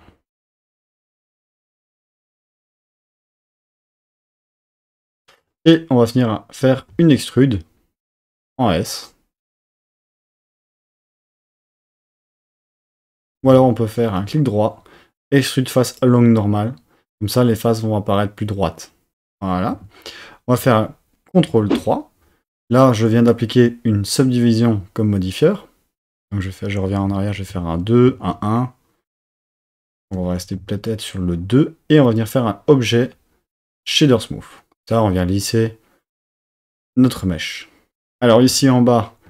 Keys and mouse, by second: 1.1 shift+click, 2.1 shift+click, 3.3 shift+click, 4.1 shift+click, 6.9 e, 8.1 s, 11.3 click, 13.5 super+z, 19.7 Tab, 21.4 super+3, 24.1 click, 27.5 super+2, 28.1 super+1, 30.1 super+2, 32.1-33.9 drag, 38.5 Tab.